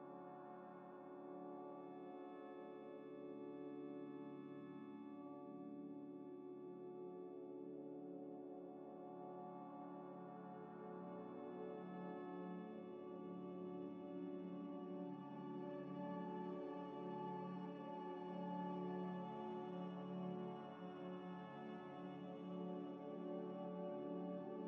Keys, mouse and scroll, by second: 0.6 ctrl+shift+click, 4.4 double click, 10.4 ctrl+shift+click, 10.9 ctrl+shift+click, 13.8 ctrl+shift+click, 14.9 ctrl+shift+click, 15.6 ctrl+shift+click, 16.0 ctrl+shift+click, 19.8 scroll up 1, 22.8 middle click, 24.6 double click.